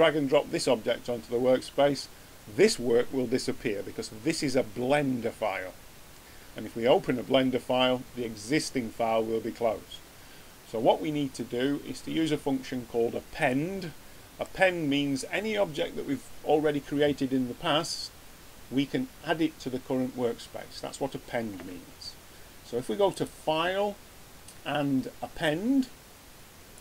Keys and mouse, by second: 13.5-13.9 middle drag.